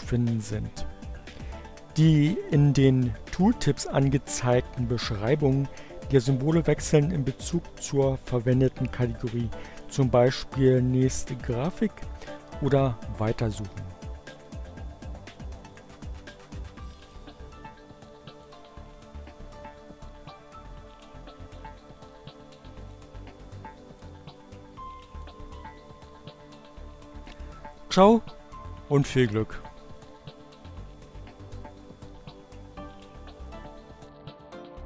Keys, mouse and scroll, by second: 13.5-14.3 drag, 15.3 click, 16.4 click, 17.6 click, 21.4 click, 23.5 click, 24.5 click.